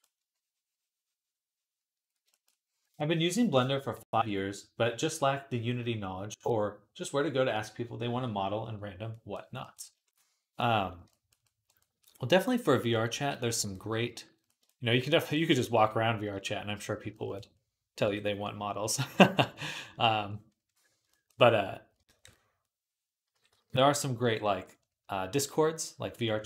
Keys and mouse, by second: 13.1 KP_3, 14.5-17.2 drag, 17.9 j, 21.1-22.3 drag, 21.1-22.3 middle drag, 21.1-22.3 right drag, 23.2 ], 23.3 ].